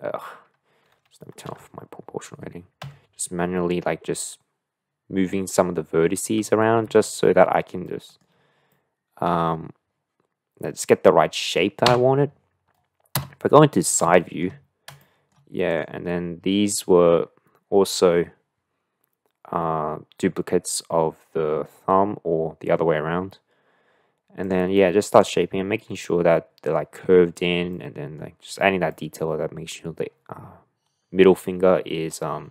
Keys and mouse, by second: 1.4 o, 2.9 g, 7.9 middle click, 8.8 shift+middle click, 12.3 Tab, 13.2 KP_3, 14.2 shift+middle click, 15.0 shift+middle click, 15.7 click, 24.4 click, 25.9-26.7 middle drag, 27.7-28.1 middle drag, 28.9 middle click.